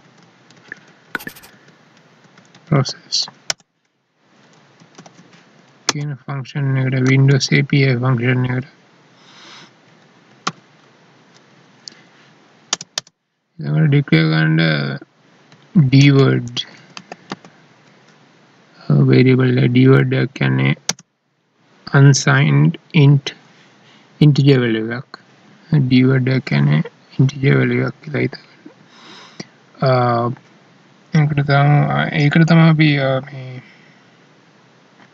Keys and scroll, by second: 2.6 Up, 7.1 ctrl+s, 10.6 alt+e, 20.9 space.